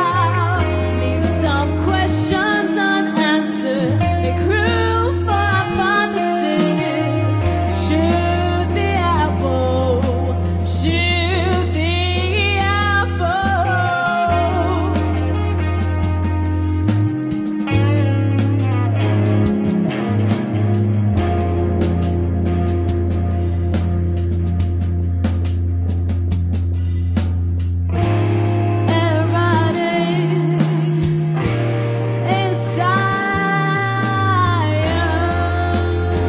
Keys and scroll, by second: 0.8 alt+super+0, 2.1 super+-, 22.2 m, 28.7 super+t, 31.1 Return.